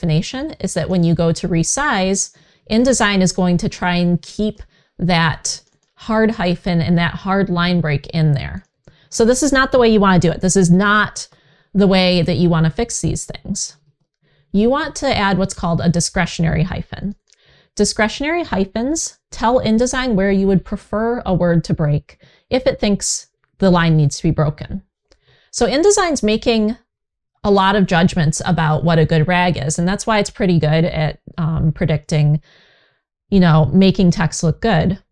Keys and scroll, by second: 11.0 super+z, 13.5 super+z.